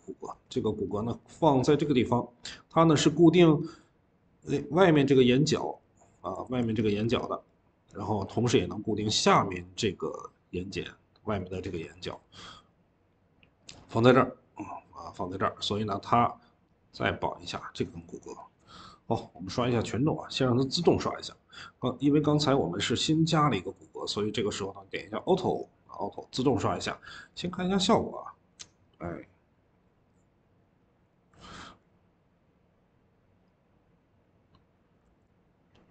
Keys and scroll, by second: 6.3 ctrl+z, 6.6 Escape, 6.8 Escape, 11.7 Escape.